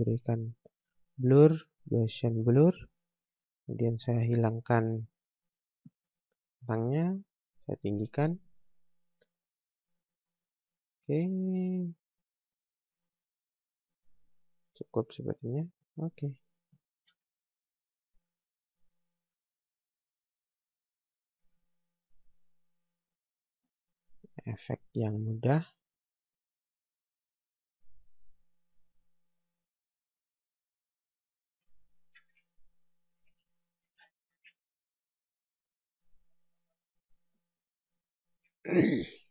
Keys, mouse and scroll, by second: 5.8 click, 15.5 scroll down 1, 16.4 scroll up 1, 16.8 click, 20.0 scroll down 1, 21.4 F4, 22.2 click, 28.7 scroll up 1, 29.4 click, 30.0 right click, 31.1 click, 32.3 ctrl+Page_Down, 34.1 shift+Page_Down, 34.4 ctrl+Page_Up, 35.5 scroll down 1, 36.2 scroll up 1, 36.4 scroll down 1, 37.2 scroll up 1, 37.7 click, 38.4 F4.